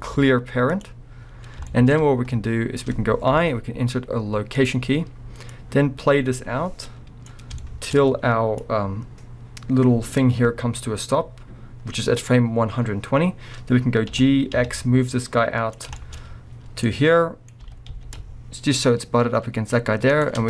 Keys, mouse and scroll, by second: 1.4-5.5 middle drag, 5.5-7.6 drag, 7.5 scroll down 2, 7.6-8.6 shift+middle drag, 8.6-15.9 drag, 14.1 g, 16.0-17.5 shift+middle drag, 16.2 scroll, 17.6 g.